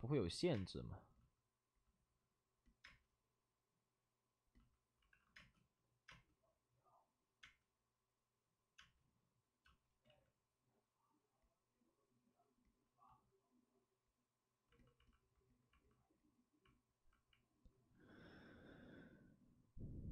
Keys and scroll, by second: 0.5 space, 2.8 space, 5.0 alt+s, 5.3 space, 6.3 space, 7.4 space, 8.7 space, 10.0 ctrl+z.